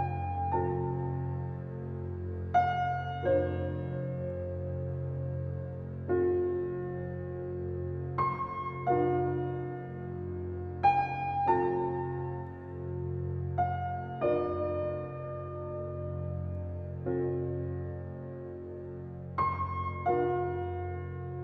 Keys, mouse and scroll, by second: 3.9 alt+right click, 5.0 alt+click, 6.1 ctrl+alt+z, 6.9 alt+right click, 7.5 alt+click, 7.9-9.6 alt+right drag, 9.6 click, 10.8 ctrl+alt+scroll down 1, 12.1 ctrl+alt+scroll up 1, 12.6 ctrl+alt+scroll up 1, 12.9 space, 13.1 click, 13.5 space, 14.7 alt+click, 16.4 click, 19.5 alt+click, 20.5 click.